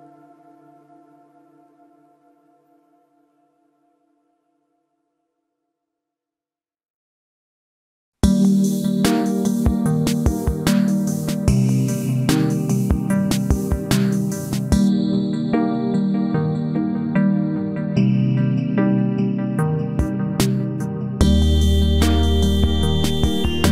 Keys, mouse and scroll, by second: 0.3-2.0 middle drag, 18.1-20.1 right drag, 19.3 c, 22.9-23.7 right drag, 23.5 c.